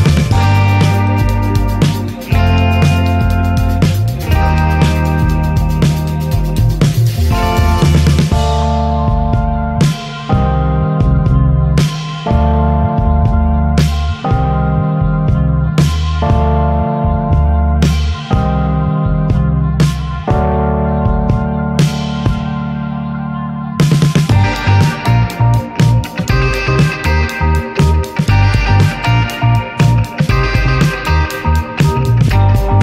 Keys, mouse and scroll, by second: 0.1 ctrl+s, 0.3 shift+middle click, 0.5 shift+a, 0.9-3.2 shift+middle drag, 3.7 shift+middle click, 4.2 g, 4.9 r, 5.3 s, 6.3 click, 7.6-8.7 drag, 8.7-9.2 middle drag, 9.2 scroll down 2, 9.9 shift+middle click, 10.4 g, 11.1 r, 11.7 middle click, 12.0 s, 12.3 middle click, 12.6 ctrl+s, 12.6 scroll up 3, 12.7 shift+middle click, 12.9 ctrl+s, 13.0 click, 13.1 middle click, 13.7 KP_0, 13.8 KP_0, 14.2 click, 14.6 KP_0, 15.7 alt+middle click, 16.3 ctrl+s, 16.4-16.9 shift+middle drag, 16.9 r, 17.3 shift+middle drag, 17.6 shift+d, 19.0 r, 20.6 ctrl+s, 21.1 g, 21.7 ctrl+s, 21.8 click, 22.1 g, 22.5-23.7 middle drag, 22.8 ctrl+s, 23.0 scroll up 2, 23.7 ctrl+s, 24.2 ctrl+s, 24.2 scroll up 2, 24.6 middle click, 25.2 ctrl+s, 25.8-27.0 drag, 27.0 n, 28.4 click, 30.3-31.9 drag, 31.9 t, 32.7-32.8 drag.